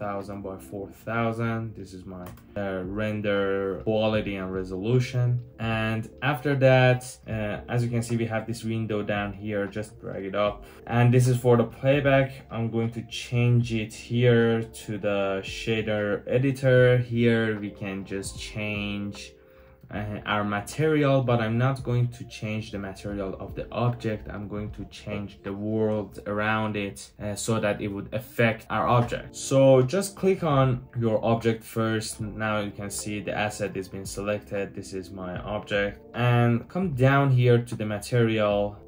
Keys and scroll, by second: 0.0-1.0 typing, 2.2 Return, 6.6-7.4 typing, 21.8 typing.